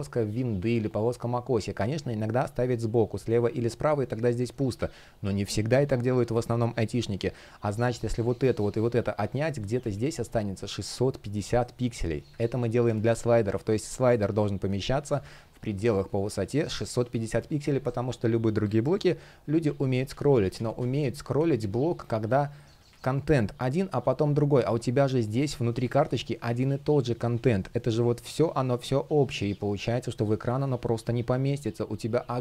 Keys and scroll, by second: 4.3 super+z, 9.1 shift+p, 13.6 space, 19.6 super+z, 22.6 Delete, 23.7 space, 25.6 space.